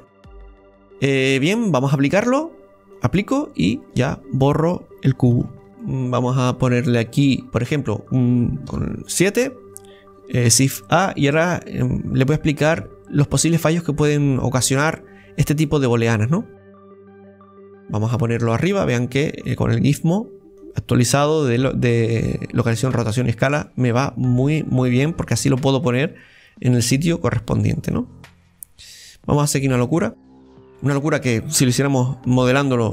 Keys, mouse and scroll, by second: 0.4-3.0 right drag, 3.0 click, 3.8-5.6 right drag, 5.6 scroll down 4, 5.8-7.9 middle drag, 8.1-8.7 scroll up 1, 8.7 KP_7, 10.5 shift+a, 14.8-18.4 drag, 18.4-20.6 middle drag, 20.6-23.7 drag, 23.7-26.7 middle drag, 27.9-30.5 drag, 30.5-30.8 scroll down 3, 30.8-32.9 middle drag.